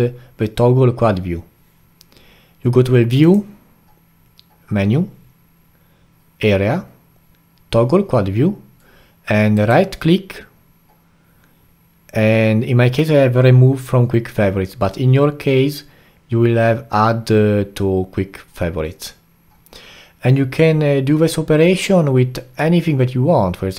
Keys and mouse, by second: 3.2-6.3 drag.